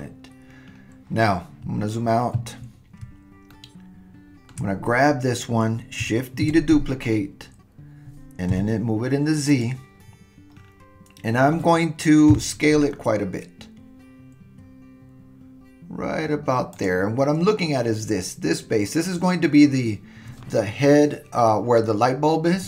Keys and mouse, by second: 3.6-4.5 shift+middle drag, 6.4 shift+d, 12.3 s.